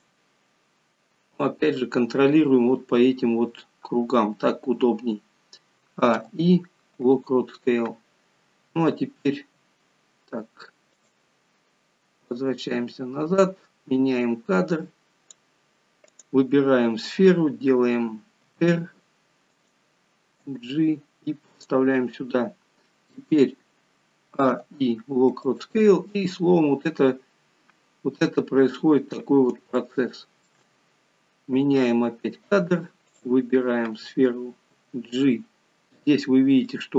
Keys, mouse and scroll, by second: 6.0 a, 9.3 r, 12.3 click, 16.2 click, 18.6 r, 24.4 a, 24.5 i, 26.0-26.5 scroll down 3, 29.9 shift+middle click, 31.0 scroll up 2, 31.7 click, 33.2 click, 34.7 g.